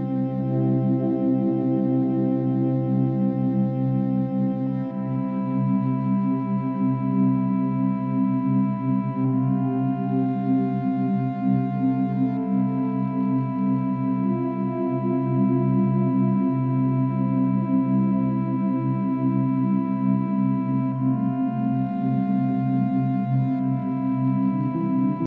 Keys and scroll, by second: 16.9-17.3 space.